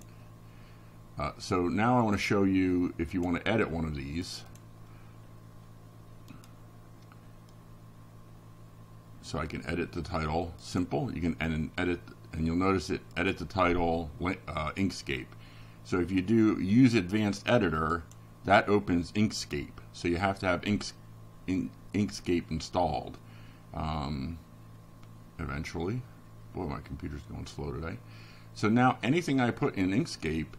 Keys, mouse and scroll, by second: 2.1 click, 2.7 click, 8.2 click, 12.3 click, 14.5 click, 26.5 click, 27.7 click, 28.8 right click.